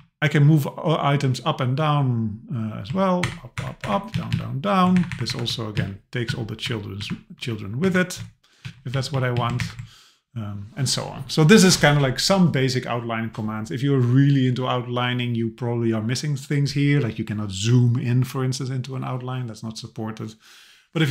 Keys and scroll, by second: 3.2 alt+Up, 4.1 alt+Down, 5.0 Up, 5.8 alt+Down, 6.6 alt+Up, 7.4 alt+Down, 7.8 alt+Up, 8.6 Down, 9.6 alt+Up.